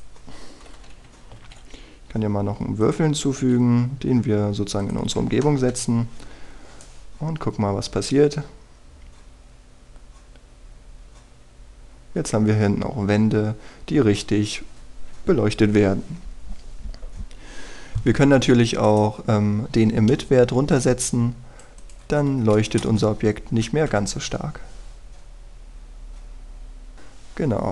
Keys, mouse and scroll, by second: 0.5 r, 2.3 shift+a, 3.8 click, 6.7 F12, 19.3 Escape, 19.8 right click, 20.7-21.3 scroll down 1, 21.7 click, 23.5 KP_1, 23.8 Return, 24.5-24.9 scroll up 1, 24.9 F12, 27.5-27.7 scroll down 1.